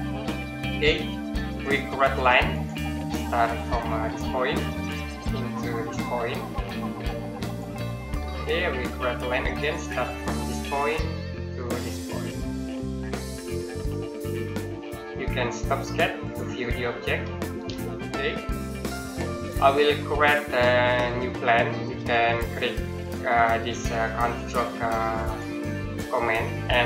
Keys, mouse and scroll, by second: 2.3 click, 7.3 click, 10.2 click, 13.3 click, 16.1 click, 17.1 middle click, 17.7 middle click, 19.9 middle click, 25.0 click.